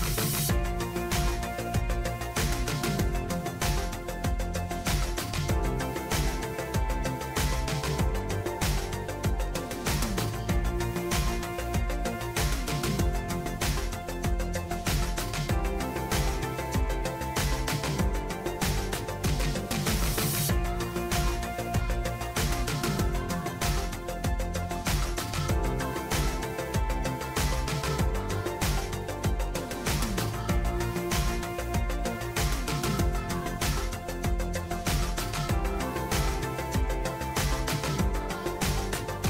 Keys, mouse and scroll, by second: 0.0 click, 1.9-3.9 drag, 3.6-5.5 typing, 6.2 Return, 8.6-12.2 typing, 13.9-14.7 typing, 15.7-16.4 typing, 18.6 Return, 25.1-26.8 scroll up 1, 27.0-29.2 scroll up 1, 29.3-30.6 typing, 33.7 click, 35.7 click, 37.4 click.